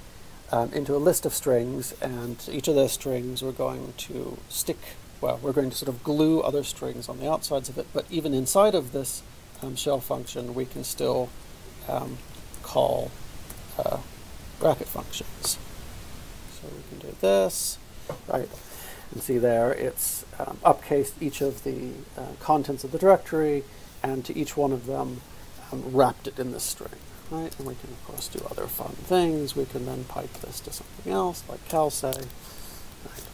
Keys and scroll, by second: 10.8-13.6 typing, 27.3 alt+p, 27.6-30.8 typing, 31.7 Return.